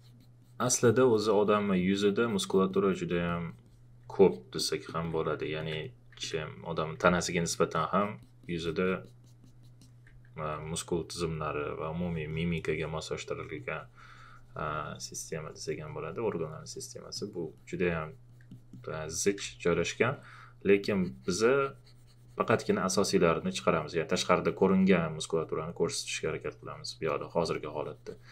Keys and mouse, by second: 4.2 alt+click, 4.9 alt+click, 6.2 alt+click, 7.3 alt+click, 12.3 alt+click, 25.2 click.